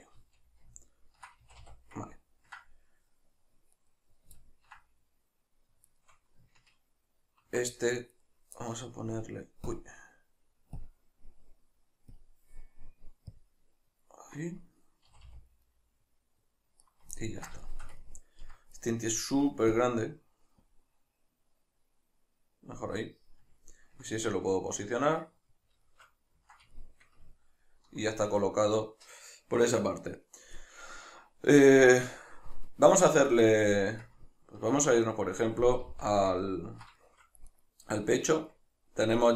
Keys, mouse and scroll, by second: 0.2 z, 0.8 ctrl+middle click, 1.4 a, 2.1-3.7 ctrl+middle drag, 3.7 right click, 4.3-5.9 ctrl+middle drag, 5.9 shift+right click, 8.1 right click, 9.0-15.1 drag, 15.1 a, 15.6-16.8 middle drag, 16.8 right click, 17.2-19.8 ctrl+middle drag, 19.8-23.6 drag, 23.6-37.5 ctrl+middle drag, 35.9 alt+q, 37.5 right click, 38.2-39.3 shift+middle drag.